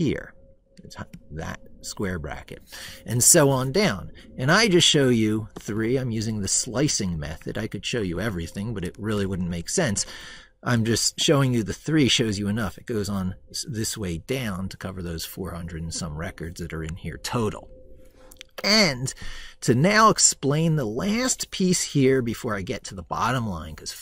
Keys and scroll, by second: 9.1 ctrl+shift+Right.